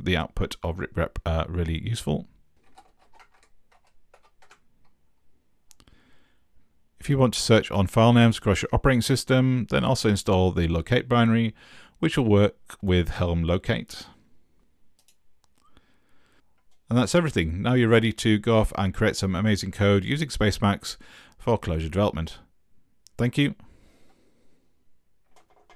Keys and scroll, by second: 2.4-4.4 typing.